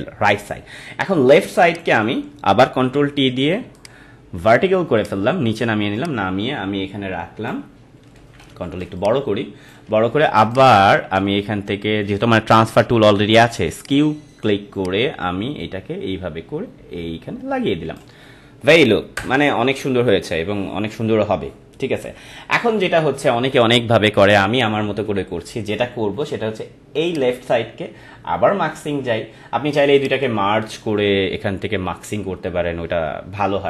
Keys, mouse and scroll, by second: 1.7 click, 2.8 ctrl+t, 3.7 right click, 4.9-8.1 drag, 8.1 ctrl+=, 8.8 space, 9.0 click, 9.3 space, 10.5 right click, 13.8-19.1 drag, 19.1 Return, 20.3 Left, 22.0 ctrl+-, 27.0 click, 29.9 click.